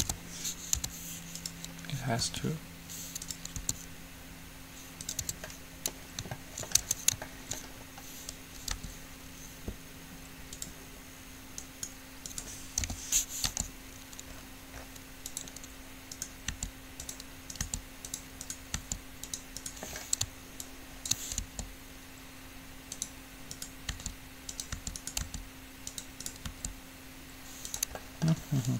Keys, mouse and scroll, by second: 2.5 r, 3.7 s, 5.6 Tab, 5.6-6.6 drag, 7.1 Tab, 8.9 g, 11.9-13.7 right drag, 13.1 o, 13.6 g, 16.3-21.6 right drag, 16.6 g, 17.8 g, 19.1 g, 20.8-22.8 drag, 21.6 g, 23.7-25.6 right drag, 24.1 g, 25.1 g, 25.5 g, 26.5-28.1 right drag, 26.6 g, 28.1-28.7 middle drag.